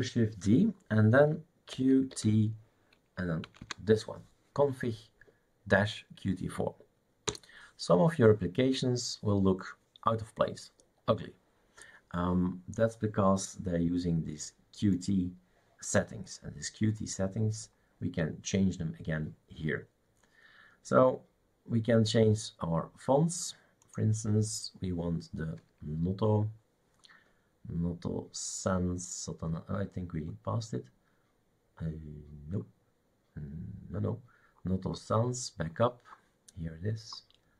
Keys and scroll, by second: 1.8-2.3 typing, 3.5 Right, 3.6 Right, 7.3 Return.